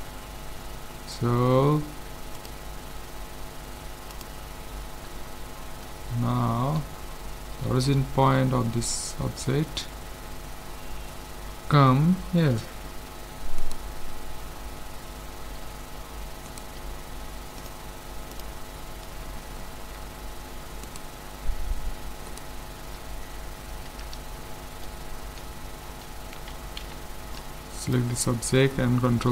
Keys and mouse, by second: 0.4-2.4 middle drag, 2.4-4.3 drag, 5.2-10.7 middle drag, 12.7 middle click, 13.6-15.4 right drag, 16.5-18.2 right drag, 17.6-19.4 drag, 19.4-20.9 middle drag, 20.9-24.2 right drag, 23.9 a, 24.3-27.4 middle drag, 26.8 b.